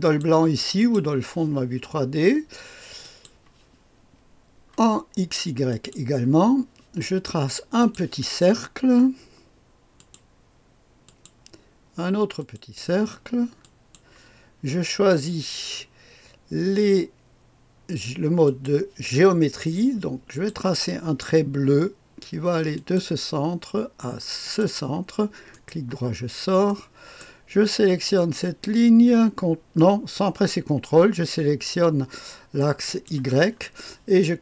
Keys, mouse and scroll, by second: 0.0-1.3 drag, 3.0 click, 5.7 click, 7.8 click, 9.9 click, 11.0 click, 12.4 click, 13.6 click, 18.4 click, 20.3 click, 22.7 click, 24.4 click, 25.5-27.7 right drag, 26.3-27.4 scroll up 2, 28.3 click, 32.8 click.